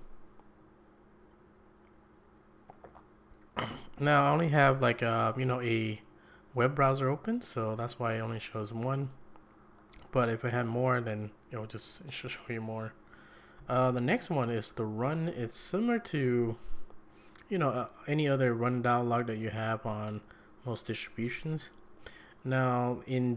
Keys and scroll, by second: 13.6 shift+Right.